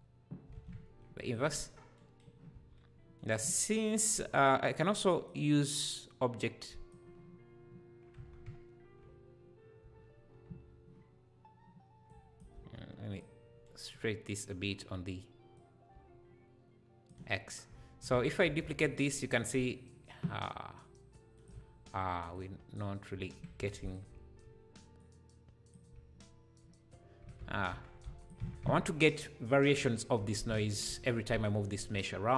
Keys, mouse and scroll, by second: 0.5 alt+a, 1.2 click, 1.7 scroll down 1, 2.5 Tab, 4.3 scroll up 3, 5.0 click, 6.0 click, 8.2 Tab, 9.8 Tab, 10.5 Tab, 12.1 click, 12.5 shift+d, 15.5-17.6 drag, 17.5 scroll down 2, 17.8 `, 18.1 Tab, 18.6 shift+d, 22.4 click, 23.6 3, 23.9 click, 25.0 click, 27.4 Tab, 27.7 Tab, 28.0 x, 28.4 Tab, 30.2 Tab, 30.9 a.